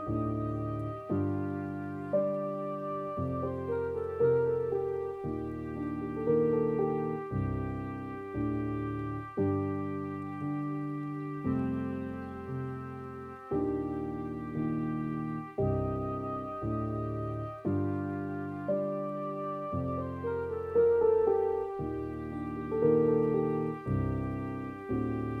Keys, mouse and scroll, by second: 1.7 s, 5.2-5.5 scroll down 3, 5.5-6.4 scroll up 2, 6.4 ctrl+b, 10.5 scroll down 3, 11.3 scroll up 2, 12.4 middle click, 13.1 scroll down 2, 13.5 scroll up 2, 15.8-22.8 alt+drag, 22.8 scroll down 2, 23.1-24.4 middle drag, 24.4 scroll up 2, 25.0-25.4 scroll down 2.